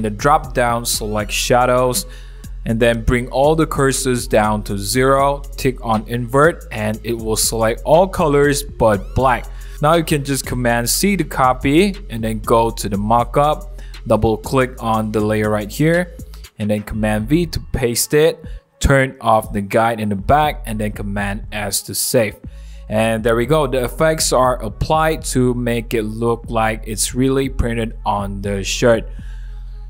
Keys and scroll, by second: 12.2 super+c, 16.7 super+v, 18.4 super+t, 20.0 Return, 22.0 super+s, 25.5 super+w, 27.4 super+1, 28.5 super+=.